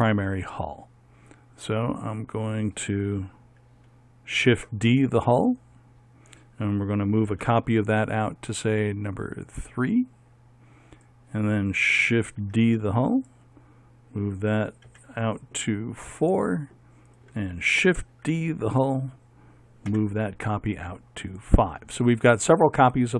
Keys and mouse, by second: 4.5 shift+d, 7.5 m, 8.6-9.7 drag, 11.1-12.4 right drag, 12.6 shift+d, 15.0 m, 17.2-18.4 right drag, 18.5 shift+d, 20.1 m.